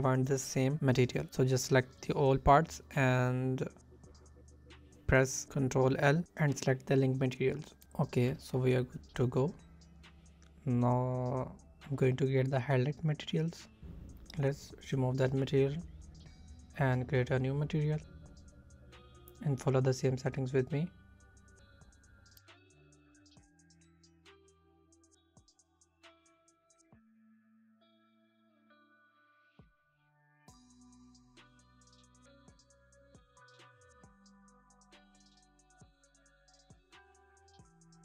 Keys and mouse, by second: 1.2 a, 1.7 ctrl+click, 2.4 ctrl+click, 3.5 ctrl+z, 5.5 ctrl+l, 7.8 click, 9.0 ctrl+l, 10.2 click, 13.2 click, 14.0-15.6 drag, 17.2 click, 19.3 click, 22.1-23.1 drag, 23.5 click, 25.2-26.9 drag, 27.4-29.6 drag, 30.7-31.0 middle drag, 31.3 middle click, 32.7 shift+middle click, 34.3-36.7 drag.